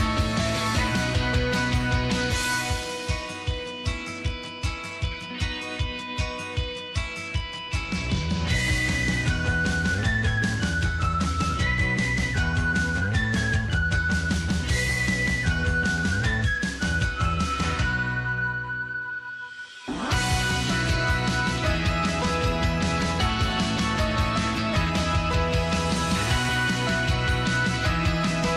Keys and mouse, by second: 1.0 g, 3.0 shift+middle click, 4.4 shift+middle click, 5.2 middle click, 6.1 shift+middle click, 6.5 middle click, 7.6 shift+middle click, 8.0 2, 8.9 alt+shift+click, 9.6-10.7 middle drag, 11.3 click, 12.2 shift+click, 12.6 middle click, 13.7-15.0 middle drag, 15.6 e, 21.3 shift+middle click, 21.8 middle click, 22.5 click, 23.8 f, 24.1 middle click, 24.8 shift+middle click, 27.1 f, 27.4 middle click, 28.0 1, 28.3 middle click.